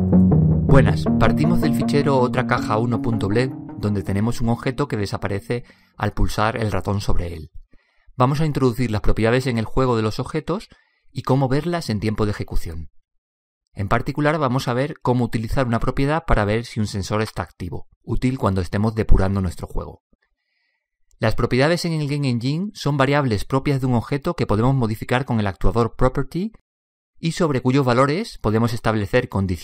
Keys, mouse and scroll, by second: 5.5-8.5 drag.